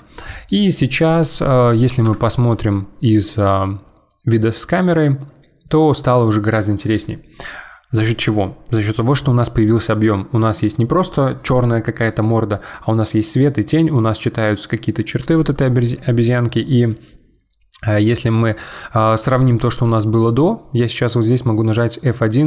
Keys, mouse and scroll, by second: 2.0 KP_0, 19.7-22.4 drag.